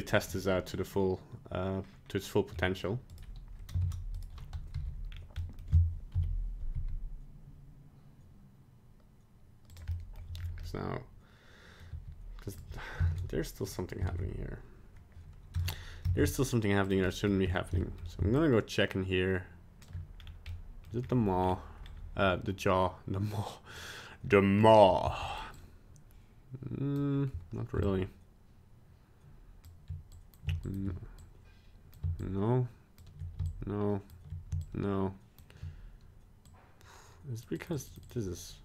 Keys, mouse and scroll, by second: 0.3 middle click, 3.1 right click, 3.9 ctrl+Tab, 4.2 right click, 4.7 alt+g, 5.1-5.4 scroll down 2, 5.4 middle click, 6.1 KP_1, 6.7 g, 9.9 middle click, 10.4 scroll up 2, 10.6 middle click, 11.5 middle click, 11.7 middle click, 11.9 g, 13.1 ctrl+Tab, 13.6 right click, 14.0 ctrl+Tab, 15.6 ctrl+Tab, 17.0 middle click, 17.4 scroll up 3, 17.8 shift+middle click, 18.0 middle click, 18.3 shift+click, 20.1 scroll down 2, 20.5 middle click, 21.0-21.4 scroll up 1, 21.4 scroll down 1, 21.4 scroll down 1, 21.8-22.2 scroll up 1, 23.7 click, 25.0 f, 25.5 click, 27.8 shift+click, 30.1 click, 30.6 shift+click, 31.2 click, 32.2 shift+click, 33.4 shift+click, 34.6 shift+click, 36.5 click, 37.6 click, 37.7 click, 37.9 click, 38.0 click.